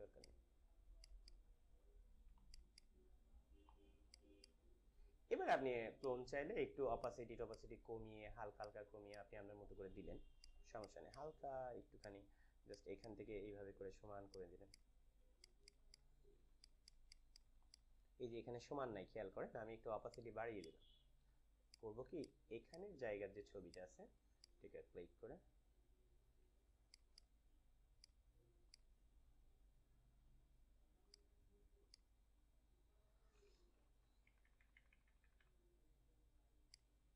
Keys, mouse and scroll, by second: 0.0 click, 0.2 alt+click, 0.8-4.0 alt+drag, 4.3-12.0 drag, 12.6-14.3 alt+drag, 13.2-14.3 drag, 15.4 alt+click, 17.2 click, 17.4 alt+click, 20.0 alt+click, 22.0-23.6 drag, 23.6 alt+click, 27.1 right click, 28.2 click, 28.8 alt+click, 31.0 click, 34.2-35.3 typing, 36.6-37.1 drag.